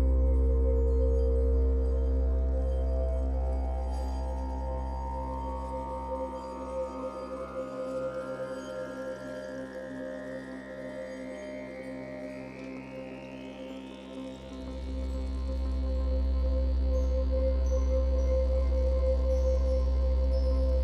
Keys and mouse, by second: 0.3-1.0 typing, 0.4-2.0 drag, 2.0-3.6 typing, 4.4 click, 4.7-6.7 typing, 4.7-6.2 drag, 7.6 ctrl+alt+click, 8.2 typing, 8.4 alt+shift+click, 9.0 click, 9.5 click, 11.9 click, 13.4 click, 16.0-17.1 typing.